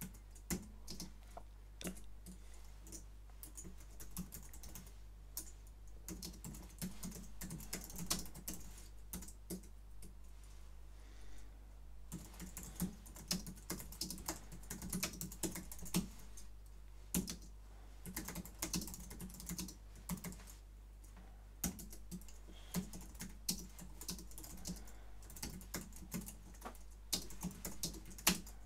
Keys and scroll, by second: 0.0-0.9 typing, 1.9 Tab, 2.9-9.1 typing, 9.5 Tab, 11.9-28.6 typing, 21.8 Tab.